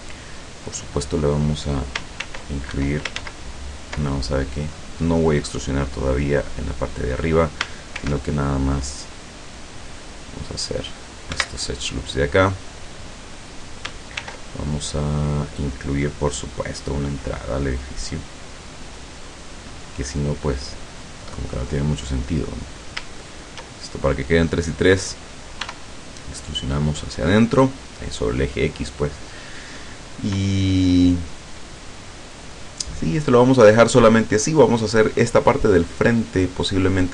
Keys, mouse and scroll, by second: 0.4 right click, 0.8 middle click, 2.2 ctrl+r, 2.8 ctrl+Escape, 3.2 ctrl+z, 4.1 ctrl+middle click, 5.5 middle click, 6.2-7.6 middle drag, 8.0 ctrl+r, 9.0-9.8 scroll up 2, 10.2 click, 11.4 Escape, 12.2 middle click, 12.9 scroll up 1, 13.2 middle click, 13.7 click, 14.2 ctrl+r, 15.6 click, 18.2 click, 19.3 click, 21.0 right click, 23.3 shift+right click, 25.7 e, 27.4 click, 32.9-33.2 scroll down 1, 33.4 scroll up 1.